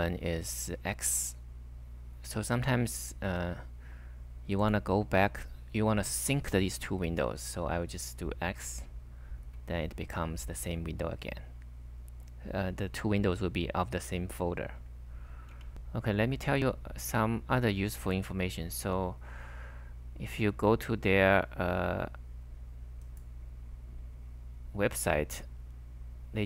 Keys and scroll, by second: 2.5-3.2 typing, 8.5 x, 9.4 k, 14.8 ', 15.5 h.